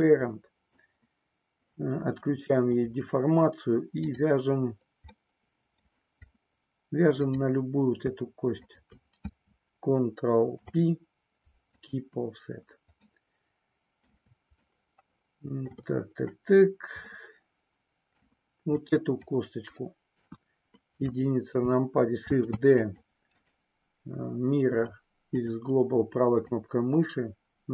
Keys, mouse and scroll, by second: 2.8 click, 4.0 click, 5.2 middle click, 7.2 click, 10.5 ctrl+p, 13.0-14.2 middle drag, 14.5-15.9 shift+middle drag, 17.2-18.3 middle drag, 18.8 click, 20.0 KP_1, 22.3 shift+d, 22.8 click, 25.0-26.5 right drag, 26.5-27.7 drag.